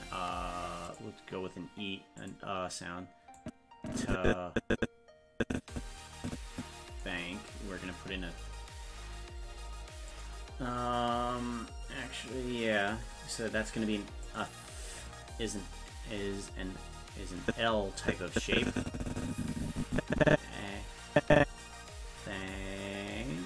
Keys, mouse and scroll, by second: 0.9 click, 2.2 click, 3.4-7.1 drag, 10.1 click, 14.3 click, 17.4-21.7 drag, 23.2 click.